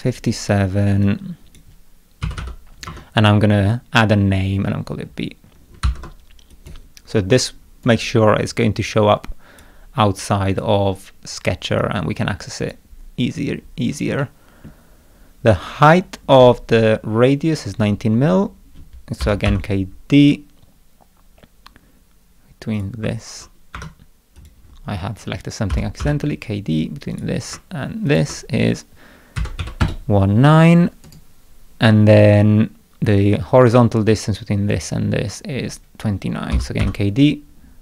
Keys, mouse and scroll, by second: 1.0 click, 2.9 Tab, 3.7 middle click, 5.8 shift+b, 6.5 click, 7.9 right click, 8.9-9.6 drag, 10.2 click, 11.8-12.7 drag, 14.2 middle click, 19.0-20.0 typing, 22.8 click, 23.8 Escape, 24.4 click, 25.7 k, 26.0 d, 27.1 click, 28.1 ctrl+click, 31.1 right click, 36.5 k, 36.8 d.